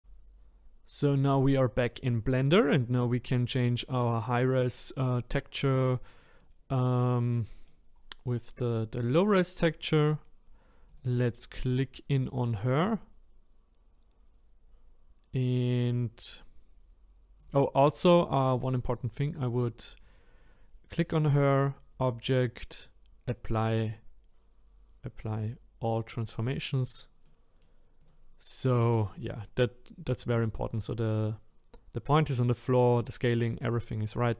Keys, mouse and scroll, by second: 0.0-3.6 middle drag, 3.6-4.2 scroll up 1, 4.2-4.6 scroll down 4, 4.6 middle click, 5.3-5.6 scroll down 1, 5.6 middle click, 6.5-7.3 scroll up 3, 7.3 scroll up 1, 7.4 middle click, 7.9-11.0 scroll down 2, 11.0 click, 11.5-17.5 middle drag, 17.5 click, 20.7-25.9 drag, 26.9 click, 27.2 middle click, 28.1 click, 29.2-32.2 middle drag.